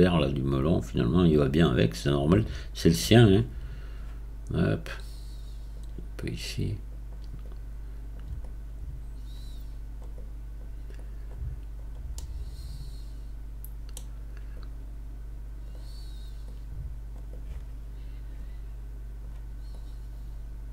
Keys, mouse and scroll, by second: 1.4-2.2 right drag, 2.2-3.1 drag, 3.1-6.4 right drag, 6.4-7.4 drag, 7.4-8.4 right drag, 8.4-10.2 drag, 10.2-11.0 right drag, 11.0-12.2 drag, 12.2-14.6 middle drag, 14.6-16.4 right drag, 16.4-17.3 drag, 17.3-19.7 right drag, 19.7-20.7 drag.